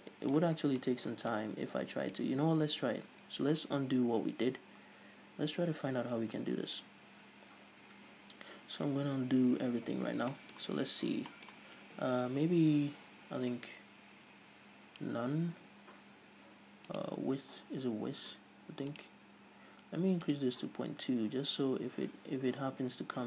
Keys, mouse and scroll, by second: 0.6 scroll down 2, 1.5-1.9 scroll up 2, 2.5-3.2 scroll up 2, 3.2-3.8 scroll up 1, 3.8 Tab, 6.1 ctrl+z, 10.4-17.1 middle drag, 10.9 Tab, 11.1 scroll up 2, 17.1 click.